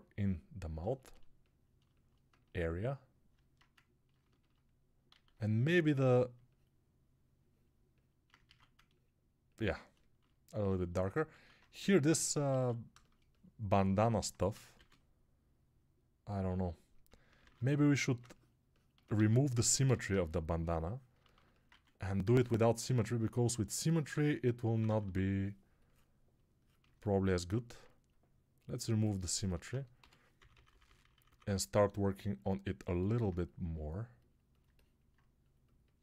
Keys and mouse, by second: 5.0 alt+q, 8.4 alt+q, 11.4 alt+q, 14.6 shift+r, 17.3 ctrl+r, 19.0 alt+q, 19.7 g, 21.5 1, 22.1-22.8 [, 24.0-24.9 typing, 29.8-31.3 typing.